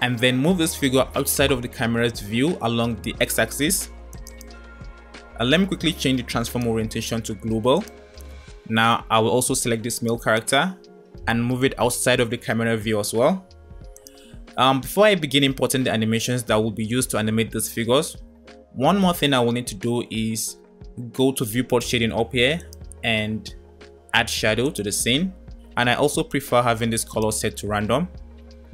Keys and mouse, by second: 0.6 g, 6.6-8.5 drag, 10.7 g, 17.9 middle click, 18.0 click, 18.1 middle click, 22.6-27.9 drag.